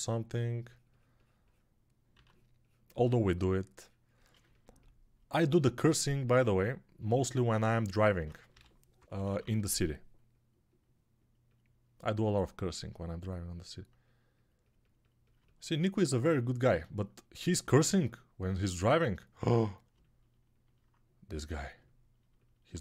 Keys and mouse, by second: 2.0 x, 8.4-9.3 typing.